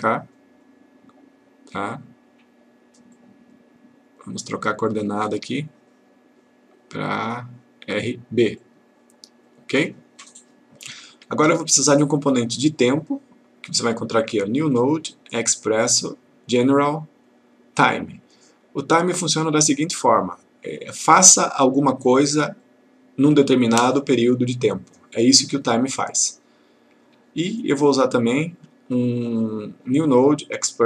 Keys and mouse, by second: 3.2-4.1 click, 8.6 click, 12.3 right click, 18.2 click, 27.6 right click.